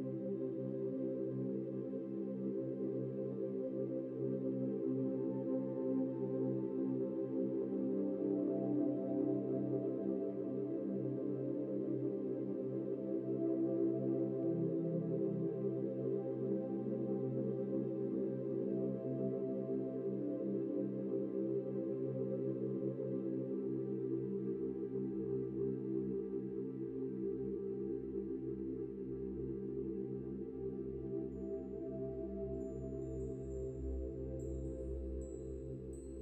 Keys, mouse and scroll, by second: 0.4 scroll up 4, 0.5 click, 0.6-1.1 scroll down 4, 1.1-3.0 drag, 3.7 middle click, 4.3 click, 6.3 s, 7.7 scroll up 3, 7.9 middle click, 8.7 click, 10.2 click, 12.5-12.9 scroll down 8, 12.9-13.7 middle drag, 13.7 KP_1, 14.0 scroll down 5, 14.4-15.1 scroll up 9, 15.1-15.8 middle drag, 15.8 ctrl+a, 16.4 ctrl+a, 17.8-18.2 right drag, 18.2 Tab, 18.4-19.1 scroll up 7, 19.1 middle click, 19.7 click, 20.6 click, 21.0 click, 21.7 ctrl+b, 24.4 click, 25.4-26.9 drag, 27.5 scroll up 3, 27.7 scroll down 3, 28.9-29.5 scroll down 1, 30.9-32.6 middle drag, 33.8 scroll up 1, 34.8 ctrl+b.